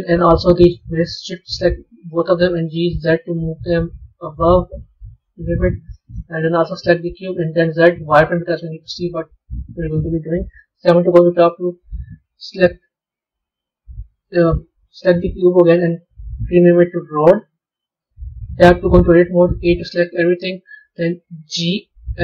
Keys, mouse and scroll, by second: 0.6 shift+click, 2.4 g, 6.3 click, 7.5 z, 8.5-10.6 middle drag, 10.6 KP_7, 11.7 a, 12.1 a, 13.9 a, 15.0 click, 15.6 click, 15.8-18.6 drag, 18.6 b.